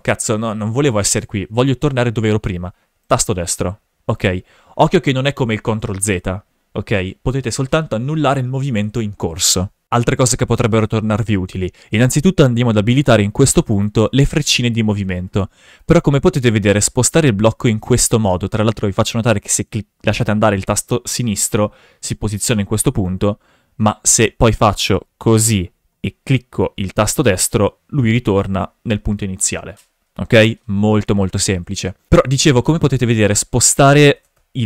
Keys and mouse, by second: 13.7 click, 15.8-21.3 drag, 23.1 ctrl+z, 24.8-28.1 drag, 27.0 right click, 32.6-33.6 drag, 34.0 shift+f.